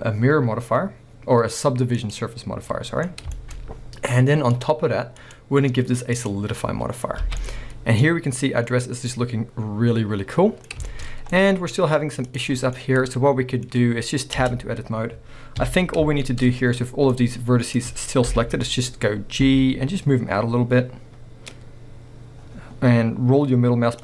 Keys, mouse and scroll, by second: 2.6 scroll up 1, 2.7-4.6 middle drag, 3.6-4.3 scroll up 2, 4.5 click, 5.2-7.4 drag, 7.0 scroll down 2, 7.2 alt+a, 7.4-11.2 middle drag, 8.7-9.2 scroll up 2, 11.1 scroll up 2, 11.4-12.3 middle drag, 11.8-12.3 scroll up 2, 12.3 click, 12.6 scroll down 1, 12.8-15.6 middle drag, 13.9-14.4 scroll down 1, 14.4 b, 15.6 KP_1, 16.2 shift+middle click, 16.5 scroll up 1, 17.1 middle click, 18.3 KP_1.